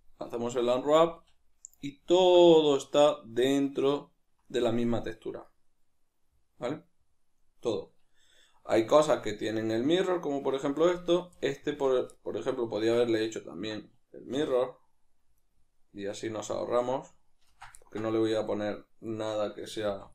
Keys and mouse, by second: 8.6 Tab, 9.5-11.1 right drag, 11.4-15.4 middle drag, 11.7 Tab, 14.3 2, 15.4 alt+right click, 16.3-17.5 alt+shift+right drag, 17.5 ctrl+z, 17.8-18.4 ctrl+middle drag, 18.4 alt+shift+right click, 19.0 alt+shift+right click, 19.8 v.